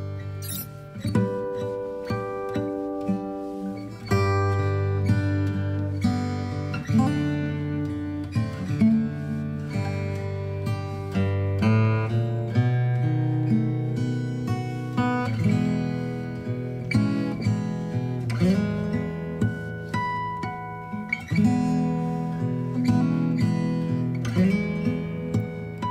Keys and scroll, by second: 0.4 space, 7.2 typing, 7.5 Return, 7.7 ctrl+j, 19.5 Up.